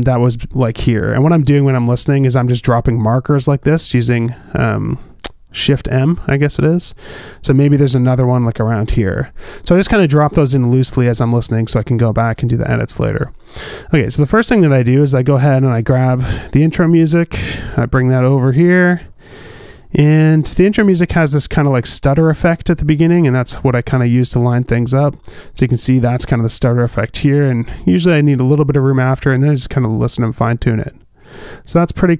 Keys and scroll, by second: 2.4 shift+m, 10.5 shift+m, 30.8 space.